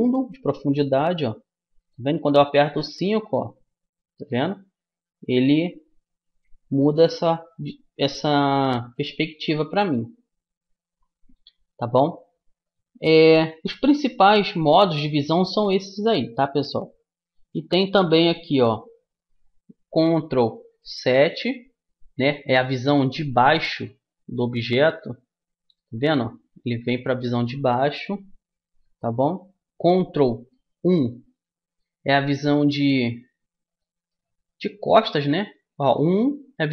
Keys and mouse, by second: 2.5 KP_5, 22.5-30.9 middle drag, 32.4-36.7 middle drag, 35.7 KP_1.